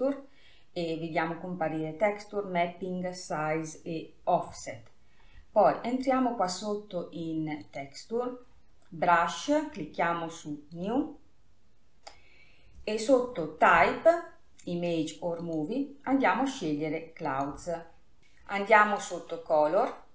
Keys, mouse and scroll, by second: 5.8 scroll down 4, 8.0 click, 11.1-14.1 drag, 15.8-18.2 drag, 18.2-18.8 scroll down 4, 19.3-19.8 drag, 19.8-20.1 scroll down 3.